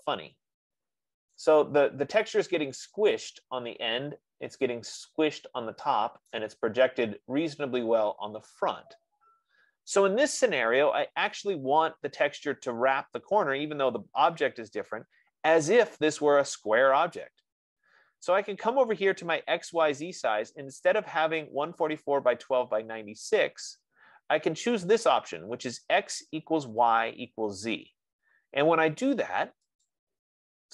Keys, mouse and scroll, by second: 1.8 right click, 6.6 right click, 9.3 F15, 11.4-11.8 scroll, 30.5-30.7 drag.